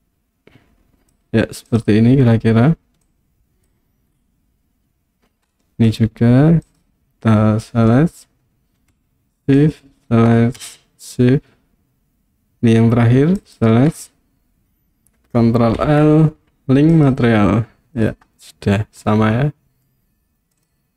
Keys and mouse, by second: 3.1 click, 5.5-5.9 middle drag, 9.7 shift+click, 13.5 shift+click, 15.8 ctrl+l, 19.1-19.9 middle drag.